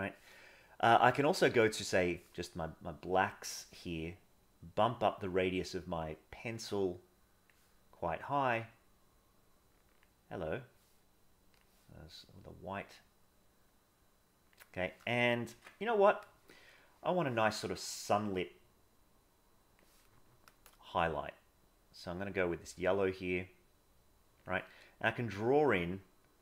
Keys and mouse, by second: 1.3 click, 4.5-7.5 drag, 8.3-10.0 drag, 12.4-14.5 drag, 15.5 ctrl+z, 16.7 middle click, 18.4-19.7 drag, 20.8-24.5 drag, 25.4-26.4 drag.